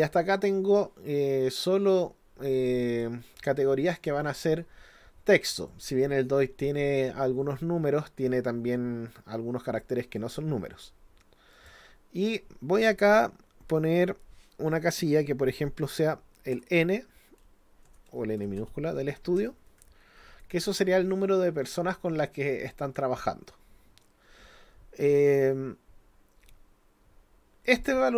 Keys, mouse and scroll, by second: 1.5-3.0 drag, 3.9 click, 5.7 click, 10.2 click, 11.5 click, 27.7 click.